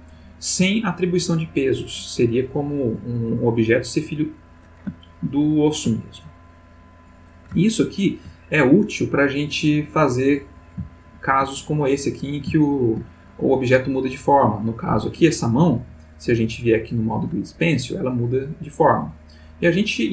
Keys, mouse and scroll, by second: 0.0-0.8 ctrl+middle drag, 5.0-6.0 ctrl+middle drag, 7.6-8.4 ctrl+middle drag, 10.9-11.5 shift+middle drag, 12.6-13.1 shift+middle drag, 14.0 click, 15.9 click, 17.0 click, 17.9-20.1 drag.